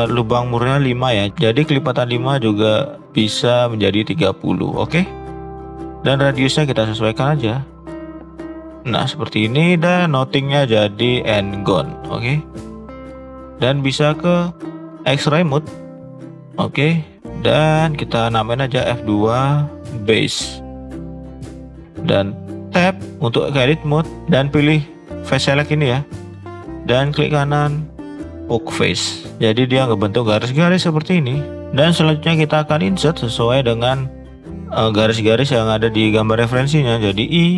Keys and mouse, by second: 6.4-8.8 drag, 10.2-11.6 drag, 12.7 click, 16.9-18.7 drag, 18.7 F2, 22.7 Tab, 27.1-28.5 right drag, 31.3 shift+middle click, 32.9 shift+click, 33.6 shift+click.